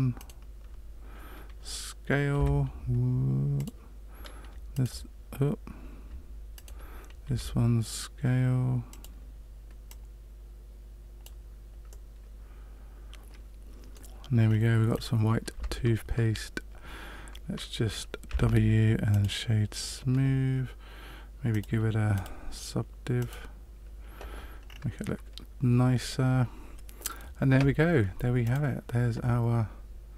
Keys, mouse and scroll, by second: 0.1 alt+right click, 2.3 s, 4.5 space, 6.5 alt+right click, 7.2 s, 9.8 click, 11.8 middle click, 14.4 scroll down 1, 15.0 scroll down 1, 15.5 Tab, 18.2 w, 21.5 click, 22.1 click, 24.6-25.0 scroll down 3, 28.4 click.